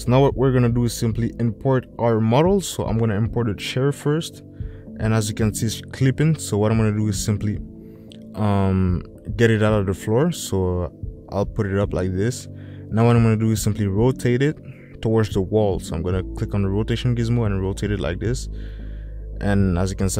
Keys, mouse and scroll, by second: 6.7 s, 8.3-9.3 drag, 9.6 ctrl+z, 10.9 click, 14.8 middle click, 16.3 click.